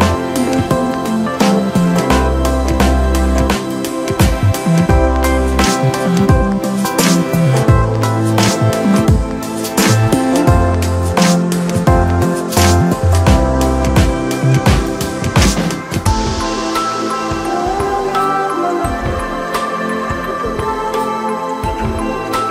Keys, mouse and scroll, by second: 0.0-0.5 scroll down 4, 0.5 shift+middle click, 0.9 scroll up 3, 2.3 drag, 2.7-3.2 scroll down 3, 3.3-4.5 scroll down 12, 4.5 click, 6.5-8.1 scroll down 2, 8.1 drag, 9.2-12.0 drag, 12.0-13.3 scroll down 2, 13.3 click, 13.7-14.2 scroll down 2, 14.2-16.1 middle drag, 16.1-17.2 scroll up 2, 17.2 scroll up 1, 17.3 KP_1, 18.0-19.0 scroll down 2, 19.0 click, 19.5-19.9 scroll up 2, 19.9-20.6 scroll down 2, 20.6 KP_3, 21.9 KP_1.